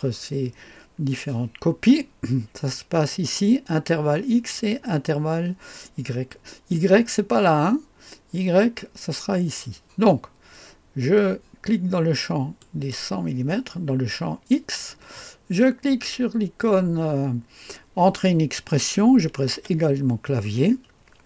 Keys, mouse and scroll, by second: 12.5-13.5 drag, 19.5 Menu, 19.8 =.